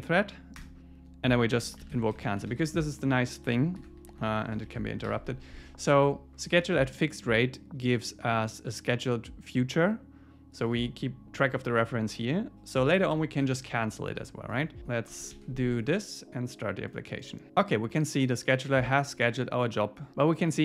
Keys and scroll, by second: 0.6 Return, 6.1 super+s, 15.3 super+s.